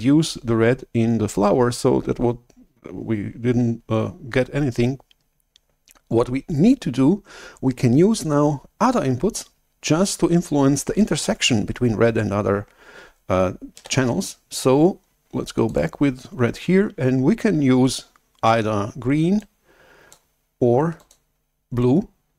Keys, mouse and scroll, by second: 14.0 shift+super+F11, 15.6 click, 19.4 click, 20.9 click, 21.7-22.3 drag.